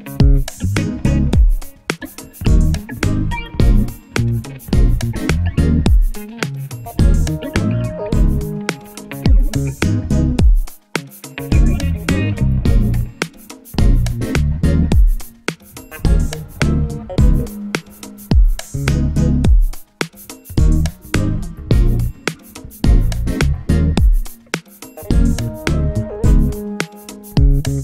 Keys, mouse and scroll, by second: 5.7 shift+Down, 6.2 Up, 6.4 Up, 6.5 Up, 6.7 Up, 7.0 click, 8.5-10.4 alt+shift+drag, 13.2-15.4 drag, 15.9 shift+Right, 16.1-17.1 drag, 19.1 ctrl+z, 20.8 click, 25.6 alt+scroll up 1, 26.3 click.